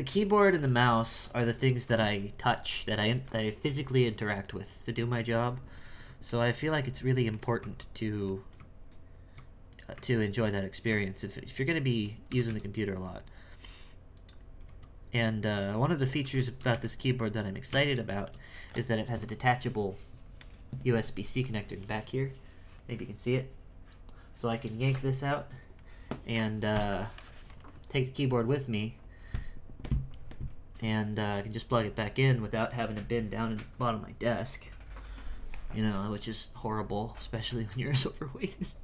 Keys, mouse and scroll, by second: 5.9-6.2 scroll up 3, 6.2-7.6 shift+middle drag, 7.6 Tab, 8.1 right click, 9.6 right click, 10.4 right click, 11.2 ctrl+right click, 11.9 click, 12.2 s, 15.2 right click, 15.9 shift+right click, 16.2 shift+s.